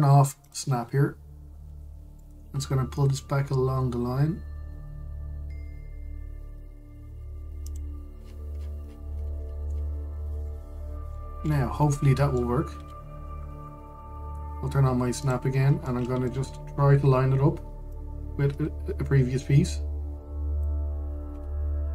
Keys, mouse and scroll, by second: 1.1 click, 2.3 g, 8.9-10.1 scroll down 1, 11.1 middle click, 12.0 scroll up 1, 12.6 middle click, 13.4 Tab, 13.7-14.1 scroll down 1, 14.1-15.9 middle drag, 15.9 click, 16.2-16.5 scroll, 16.5-18.6 middle drag, 18.6 click.